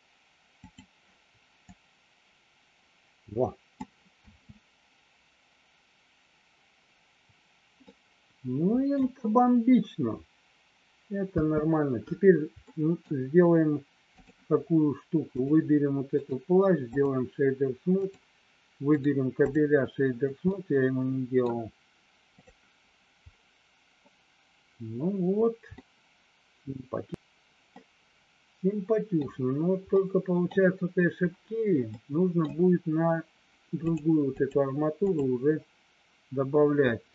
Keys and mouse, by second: 1.7-3.9 drag, 4.2 space, 7.8-8.9 middle drag, 11.3 space, 12.7 middle click, 14.2 click, 15.3 click, 16.2 right click, 18.0 click, 18.8 right click, 20.4 middle click, 25.8-27.1 middle drag, 27.6-29.3 middle drag, 29.9 middle click, 31.9 middle click, 33.7 click, 34.3 click, 35.0 click.